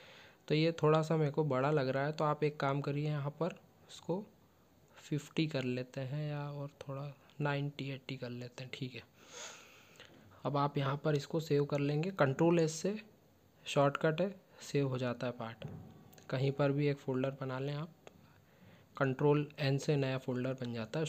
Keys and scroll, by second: 7.6 ctrl+q, 12.4 ctrl+q, 12.7 ctrl+s.